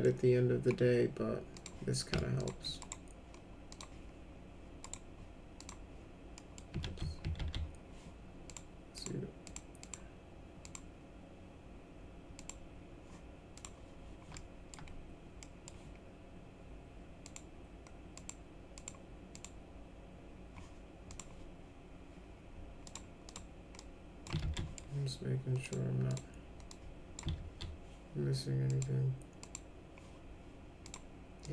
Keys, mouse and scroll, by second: 1.5 click, 2.4 ctrl+click, 2.8 right click, 3.7 click, 4.8 right click, 5.6 click, 6.4 middle click, 6.8 ctrl+z, 7.4 ctrl+z, 8.5 click, 9.0 click, 9.5 click, 9.8 click, 10.6 click, 12.4 click, 13.6 click, 14.4 alt+middle click, 15.4 middle click, 17.2 click, 18.2 click, 18.8 click, 19.3 click, 21.1 click, 22.9 click, 23.3 click, 23.8 click, 24.4 ctrl+z, 24.5 ctrl+middle click, 25.6 click, 26.1 click, 26.7 click, 27.4 ctrl+z, 28.7 click, 29.4 click, 30.8 click, 31.4 click.